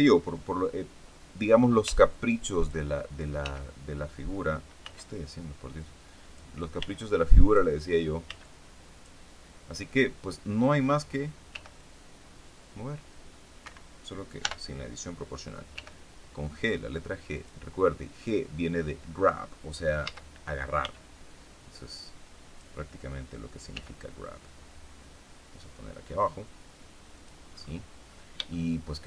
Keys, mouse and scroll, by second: 1.8 f, 2.0 click, 3.3 f, 4.8 b, 5.8 click, 6.7 b, 7.0 click, 8.2 b, 8.4 click, 11.4 g, 13.6 Escape, 14.4 o, 15.7 g, 17.3 click, 20.0 a, 20.7 b, 21.8 click, 23.6 g, 27.1 click, 27.5-28.2 scroll down 2, 28.4 shift+middle click.